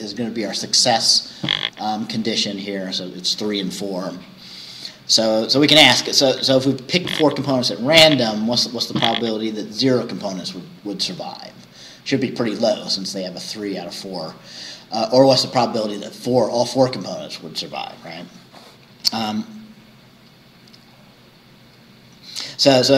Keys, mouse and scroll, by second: 18.9-19.8 scroll down 4, 20.9-21.3 scroll down 2.